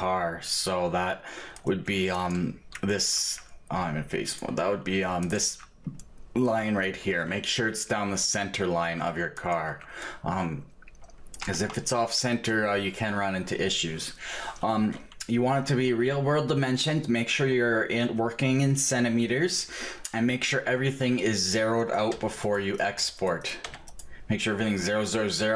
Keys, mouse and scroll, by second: 2.3-4.6 right drag, 4.6-6.2 drag, 5.5 right click, 6.2-11.4 middle drag, 11.7 Tab, 21.9 click.